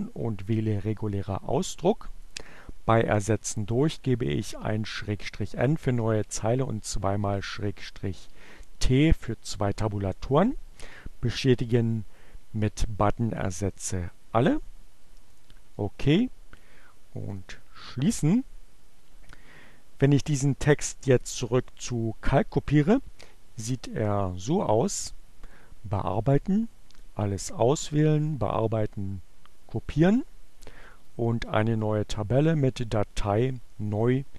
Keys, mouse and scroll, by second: 1.8 t, 4.8-13.6 drag, 14.9 click, 15.6-17.2 drag, 24.9 click, 26.4 click, 27.6 click, 29.0 click, 30.4 click, 31.2 click, 34.1 click.